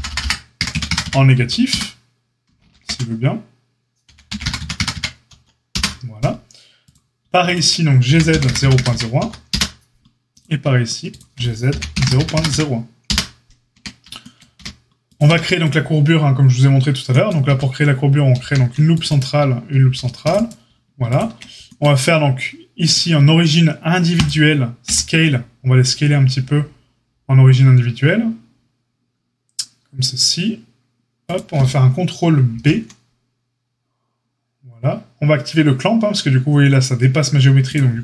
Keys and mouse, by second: 2.6 ctrl+z, 4.0 g, 7.4 shift+click, 7.5-10.2 shift+middle drag, 8.0 g, 10.2 click, 10.3-11.1 shift+middle drag, 11.1 shift+click, 11.3-21.0 middle drag, 11.6 g, 13.7 Tab, 14.5 q, 15.2 q, 17.4 Tab, 18.3 ctrl+r, 19.8 ctrl+r, 21.0 click, 21.1-22.8 middle drag, 22.8-31.4 drag, 24.8 s, 31.4-38.0 ctrl+middle drag, 32.4 ctrl+b.